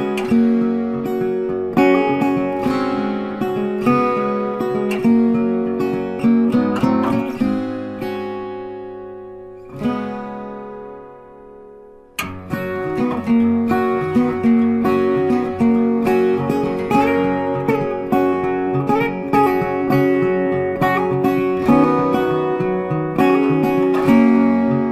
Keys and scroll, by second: 21.9 ctrl+alt+shift+e.